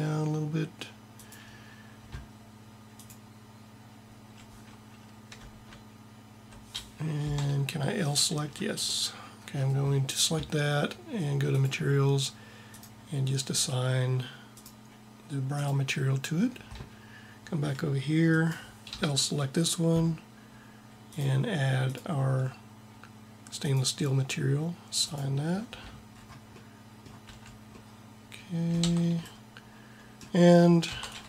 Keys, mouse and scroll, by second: 7.1 l, 8.5 middle click, 11.4-12.7 drag, 18.9 l, 27.2 a, 28.8 Tab, 30.9 Tab.